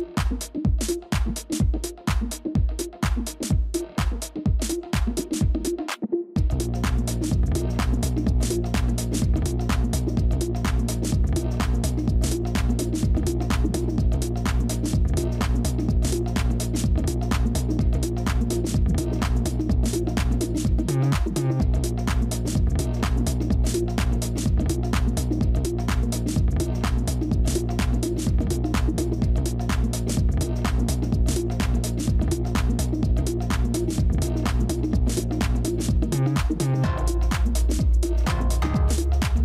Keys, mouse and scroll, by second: 3.4 ctrl++, 8.3-9.0 typing, 12.7 shift+click, 14.7-16.9 typing, 18.6 typing, 19.8 ctrl+-, 20.0 ctrl+-, 21.3 ctrl+z, 26.7 ctrl++, 38.2 ctrl+z.